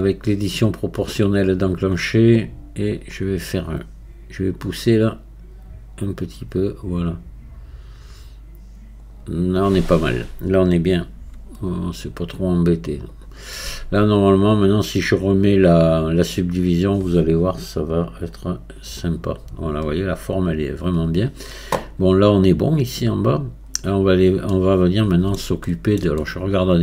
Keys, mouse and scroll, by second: 1.5-4.5 drag, 4.8-16.7 drag, 18.2-21.2 drag, 24.5-26.0 middle drag, 26.2-26.8 middle drag.